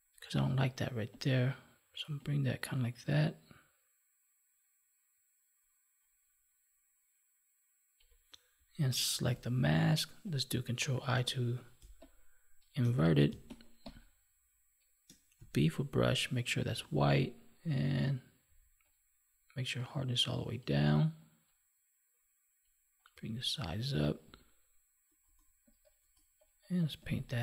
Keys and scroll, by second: 11.1 ctrl+i.